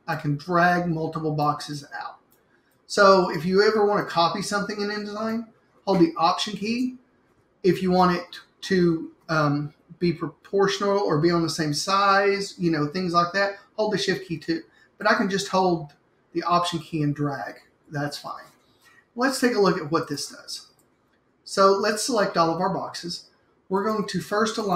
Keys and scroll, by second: 18.0 BackSpace.